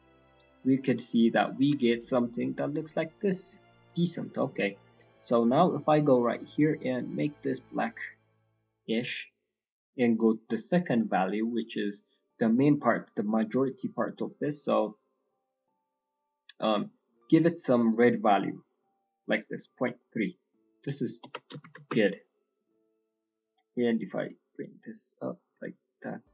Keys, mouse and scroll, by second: 0.8 scroll down 1, 0.8 middle click, 1.4-1.8 scroll up 2, 1.8 shift+middle click, 2.4 scroll up 3, 2.9 scroll down 3, 3.4 middle click, 3.6-4.2 scroll up 8, 4.2 middle click, 4.6-5.2 scroll up 2, 5.2 click, 9.0-9.3 scroll down 2, 10.0 click, 13.9 click, 23.3 click.